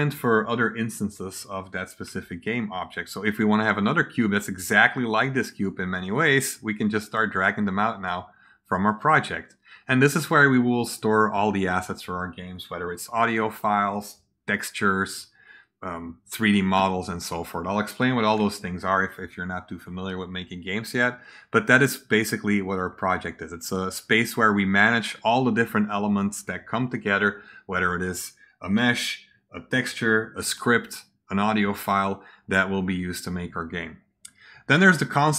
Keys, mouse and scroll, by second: 3.0-4.7 drag, 6.9-8.0 drag, 8.5-9.2 drag, 34.7 click.